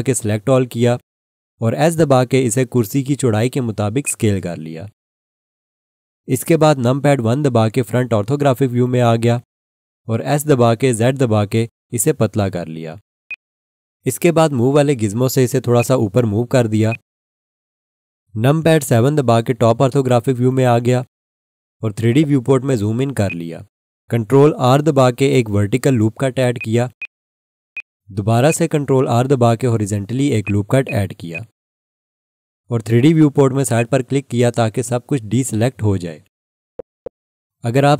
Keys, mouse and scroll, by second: 0.4 a, 2.0 s, 4.0 click, 7.0 1, 10.5 s, 13.2 click, 19.7 7, 22.0 scroll up 1, 23.1 scroll, 23.2 alt+shift+click, 25.3 ctrl+r, 26.6 click, 27.0 right click, 27.7 click, 29.3 ctrl+r, 30.4 click, 30.8 right click, 31.3 click, 36.6 scroll up 1.